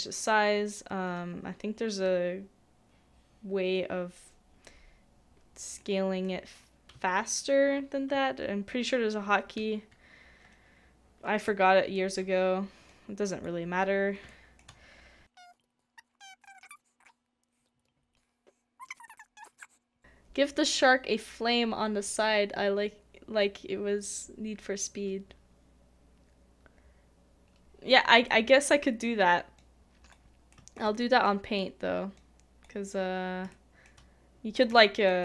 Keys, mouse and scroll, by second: 5.8 middle click, 11.4 typing, 11.5 shift+middle click, 14.3 shift+middle click, 15.5 shift+middle click, 17.6 shift+middle click, 28.3 shift+middle click, 33.5 shift+middle click, 34.7 shift+middle click.